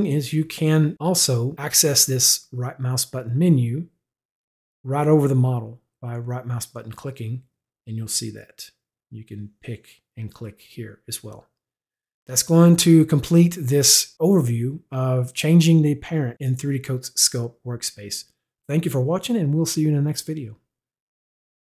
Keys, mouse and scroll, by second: 2.7 right click, 6.9 right click.